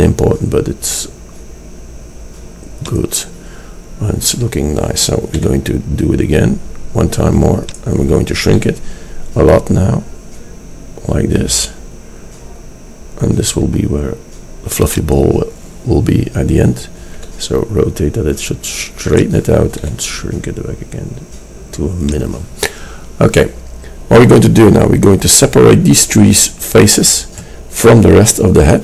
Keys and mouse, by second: 5.4 e, 8.7 s, 17.2 r, 20.1 s.